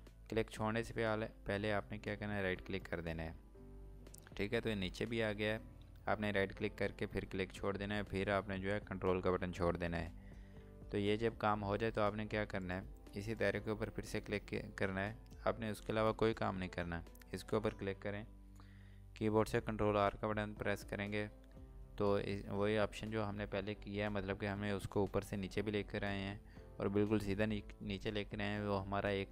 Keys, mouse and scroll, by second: 2.4 ctrl+right click, 12.6 click, 13.3 click, 18.5 click.